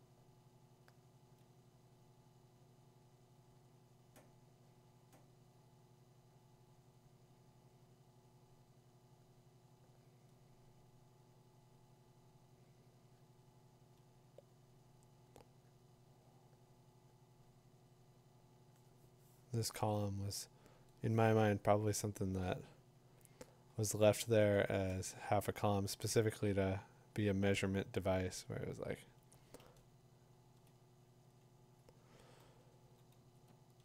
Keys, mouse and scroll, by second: 24.1 ], 24.4 ], 24.9 ], 28.0 click, 29.1 click, 30.6 click, 32.8 2.